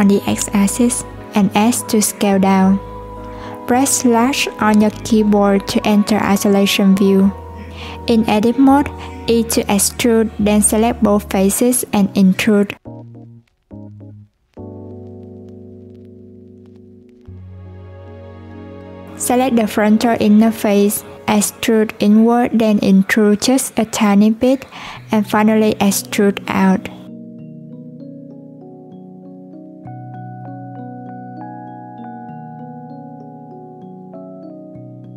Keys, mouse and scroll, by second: 3.2 /, 6.4-7.5 middle drag, 7.5 scroll down 1, 7.5 Tab, 7.7 scroll up 1, 7.9 scroll down 1, 8.8 e, 12.3-13.5 middle drag, 13.5 shift+click, 14.0-15.3 middle drag, 15.3 i, 18.3 click, 19.1-21.4 middle drag, 21.4 e, 24.2 middle click, 24.9-25.3 scroll up 2, 25.3 i, 26.6-27.6 middle drag, 27.6 e, 30.4-30.9 scroll down 1, 30.9 middle click, 31.7-33.9 scroll up 1, 33.9-34.8 scroll up 1, 34.8-35.1 scroll up 1.